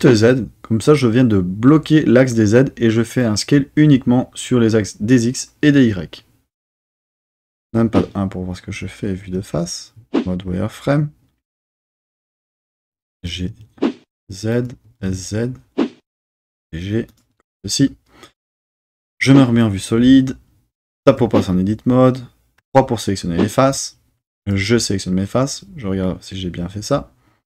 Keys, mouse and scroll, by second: 6.7 click, 7.6 KP_1, 9.3 z, 14.5 click, 14.8 s, 15.0 z, 17.0 click, 19.1 z, 21.1 Tab, 22.6 3, 23.7-24.1 drag.